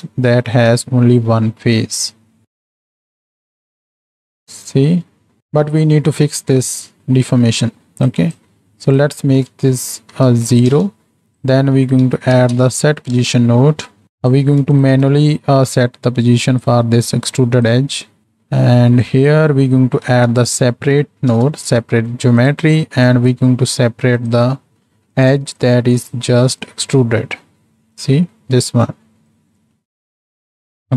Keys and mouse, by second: 0.3-1.1 drag, 1.1-1.4 middle drag, 2.7 middle click, 3.4 middle click, 3.5 z, 4.1-5.4 shift+drag, 5.9 middle click, 6.7-7.3 middle drag, 7.8 middle click, 8.1 click, 8.8-10.8 drag, 11.3-14.4 drag, 14.8 ctrl+shift+drag, 15.9-16.7 drag, 17.3 click, 18.1 click, 19.1-22.4 drag, 23.1-23.8 drag, 24.2-25.3 drag, 25.6-26.7 drag, 27.3 middle click, 28.4 middle click, 29.3-30.9 shift+drag.